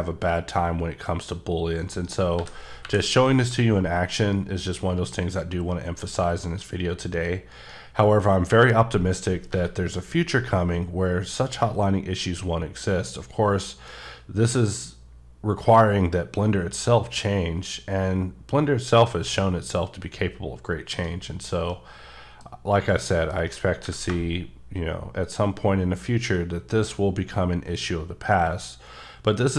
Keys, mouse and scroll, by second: 1.9 right click, 2.3 g, 2.8 y, 7.5 right click, 9.5 g, 12.1 shift+Num_Lock, 13.0 s, 14.6 s, 20.9 right click, 21.3-21.7 scroll down 3, 21.7 middle click, 22.4-22.9 scroll up 3, 22.9 shift+middle click, 23.4 shift+scroll up 2, 23.8 g, 29.4 right click.